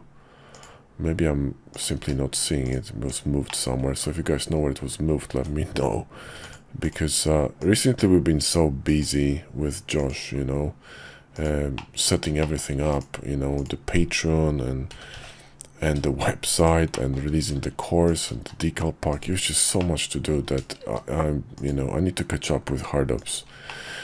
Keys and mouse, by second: 2.0 q, 3.5 middle click, 4.5 KP_5, 5.3 ctrl+`, 11.8 middle click, 12.4 shift+middle click, 12.9 click, 13.6 click, 14.9 g, 16.9 shift+click, 17.3 click, 18.0 shift+click, 18.3 q, 19.8 middle click, 20.8 q, 23.7 middle click.